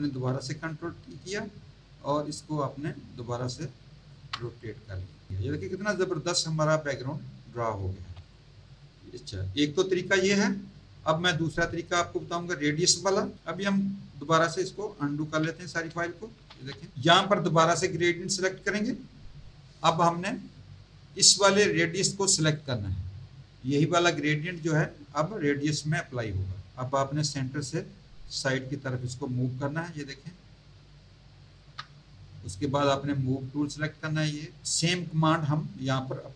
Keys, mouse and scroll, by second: 1.6 click, 4.6 click, 5.7 click, 7.9 z, 8.2 alt+click, 8.6 alt+click, 10.1 z, 10.2 click, 16.3 ctrl+z, 17.9 click, 22.5 click, 28.3 click, 33.2 click.